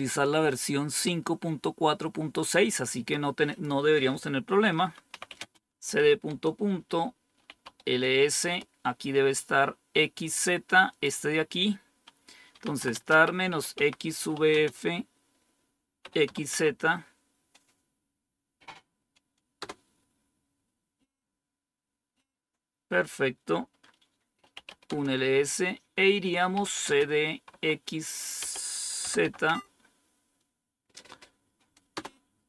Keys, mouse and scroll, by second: 3.4 click, 5.0-8.3 typing, 10.8 click, 12.2-14.4 typing, 15.9-16.4 typing, 19.5 Return, 24.4-25.1 typing, 26.2-29.7 typing, 31.8 Return.